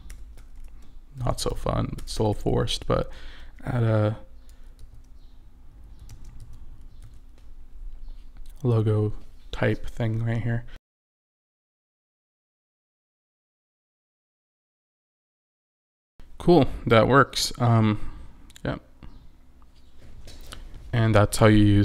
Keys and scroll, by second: 0.0-2.1 typing, 3.2 shift+BackSpace, 4.9-7.6 typing, 12.8 d, 13.0 BackSpace, 13.2 shift+o, 14.1 BackSpace, 14.1 Return, 15.2 4, 15.3 Return, 15.8 5, 15.9 Return.